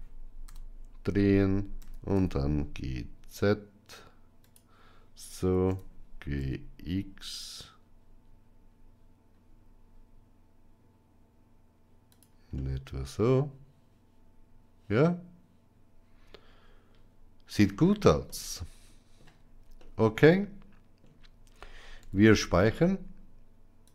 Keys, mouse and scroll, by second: 0.3 KP_1, 1.6 g, 5.5 g, 12.4-17.4 middle drag, 18.1-19.1 shift+middle drag, 19.7-20.8 middle drag, 21.8 ctrl+s.